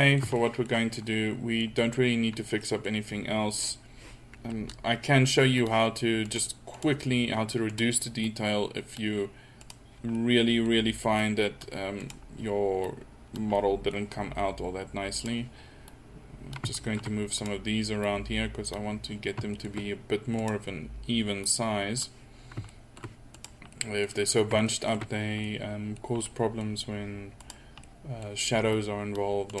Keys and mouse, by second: 0.5 middle click, 1.6 middle click, 2.7 middle click, 6.3-9.0 middle drag, 10.2 middle click, 11.2 middle click, 13.6 middle click, 13.7-15.9 drag, 16.8 middle click, 17.0 click, 17.4-19.5 middle drag, 19.5-21.4 drag, 22.4 middle click, 23.3-24.7 drag, 28.8-29.6 middle drag.